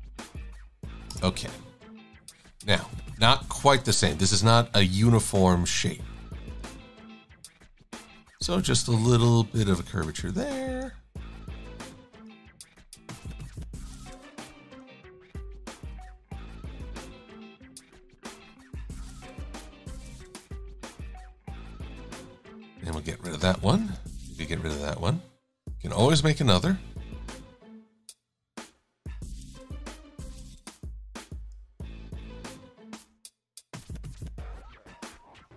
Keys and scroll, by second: 1.2 Return, 23.1 Delete, 24.2 Delete, 26.7 Delete.